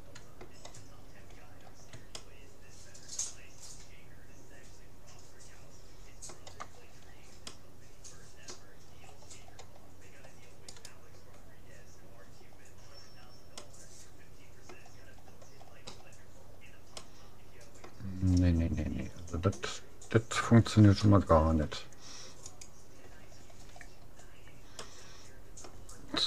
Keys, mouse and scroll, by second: 1.1-2.1 middle drag, 2.4-3.7 middle drag, 6.7-10.7 middle drag, 10.7-12.3 right drag, 12.3 middle click, 13.7-15.3 middle drag, 15.3-15.7 scroll up 1, 15.7-18.7 middle drag, 21.0 u, 23.7-26.2 middle drag.